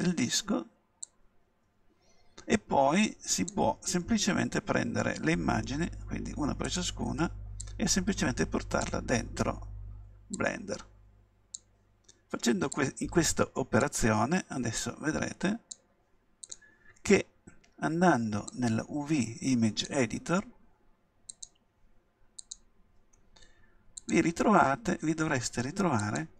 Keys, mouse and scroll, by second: 18.5-20.3 drag, 21.3-23.2 drag, 24.0-26.3 drag.